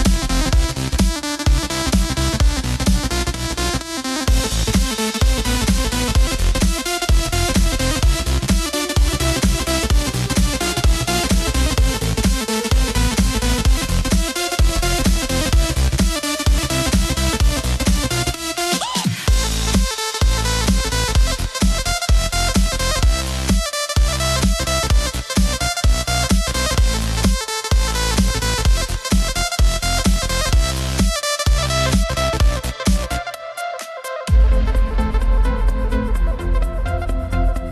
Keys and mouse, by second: 1.9 click, 4.9 e, 7.9 click, 10.7 s, 13.3 click, 15.0 g, 19.8 click, 22.6 s, 23.9 click, 25.2 e, 27.7 click, 29.5 s, 32.1 click, 33.9 e, 36.9 click.